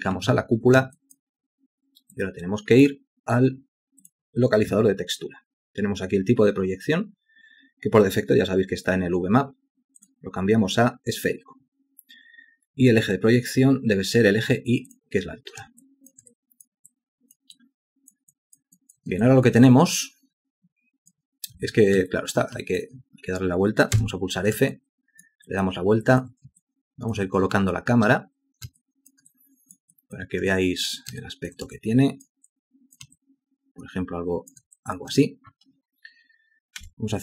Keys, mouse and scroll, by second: 1.0 alt+click, 15.9 alt+shift+click, 16.4 alt+click, 16.9 alt+click, 17.6 alt+click, 18.4 alt+click, 18.8 alt+click, 19.7 alt+click, 22.1 alt+click, 22.7 alt+shift+click, 24.0 f, 24.8 alt+click, 25.5 alt+click, 26.7 alt+shift+click, 27.6 ctrl+space, 28.9 alt+shift+click, 29.4 alt+click, 30.0 alt+click, 30.6 ctrl+alt+click, 31.3 alt+shift+click, 31.8 ctrl+alt+click, 32.5 alt+click, 33.2 alt+shift+click, 34.8 alt+click, 36.9 F8.